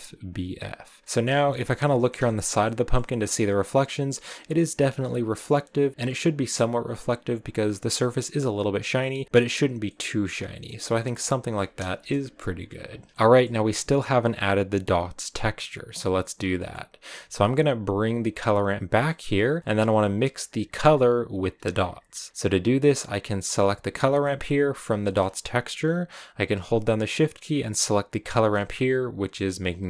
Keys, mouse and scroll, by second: 1.0 shift+middle click, 1.4-2.5 scroll up 5, 1.9 middle click, 2.5-5.6 middle drag, 3.6 click, 5.6 scroll down 1, 5.9-10.6 middle drag, 11.8 KP_0, 12.7 scroll down 1, 13.0 shift+middle click, 13.1 click, 14.4-20.7 drag, 21.5 click, 28.1 shift+click.